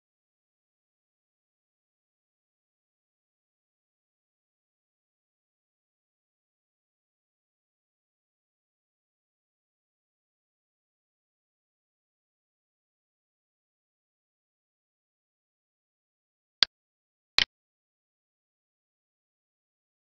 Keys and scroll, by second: 20.0 alt+e.